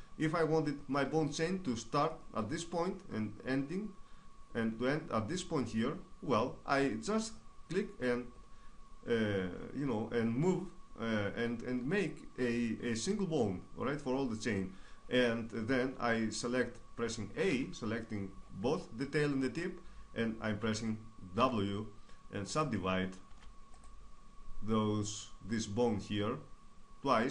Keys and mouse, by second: 17.1 a, 21.0 w, 22.9 w, 26.0 middle click.